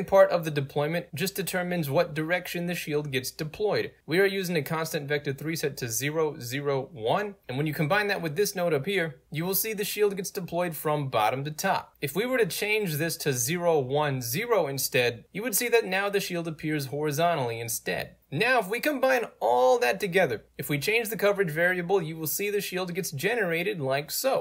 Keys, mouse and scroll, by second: 1.3 ctrl+z, 2.8 click, 3.4 click, 4.1 click, 7.8 click, 9.3 click, 10.1-12.3 drag, 12.8 click, 13.4 1, 13.9 Tab, 14.1 0, 14.3 click, 14.4-18.1 drag, 18.1 right click, 19.0 middle click, 19.1 scroll down 2, 19.2-20.5 right drag, 20.5 alt+click, 21.2-24.4 alt+drag.